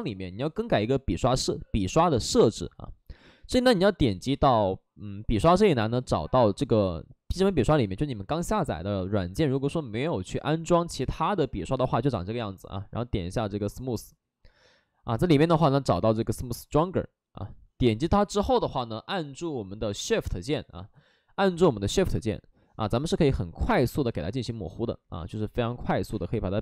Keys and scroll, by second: 21.8 space, 23.8 space.